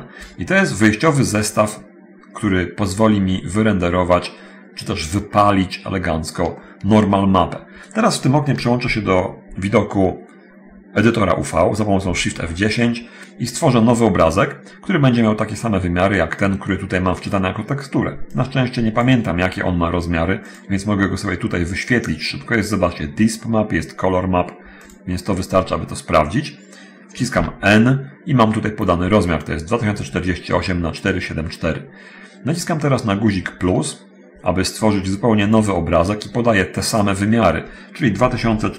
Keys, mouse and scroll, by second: 0.7 scroll up 1, 3.7 scroll down 1, 4.0-5.3 middle drag, 5.5-6.6 middle drag, 6.7-7.7 middle drag, 12.2 shift+F10, 15.7 scroll down 1, 15.9-18.4 middle drag, 18.4 click, 25.0 click, 25.9 middle click, 27.4 n, 38.3 2, 38.5 0, 38.5 4.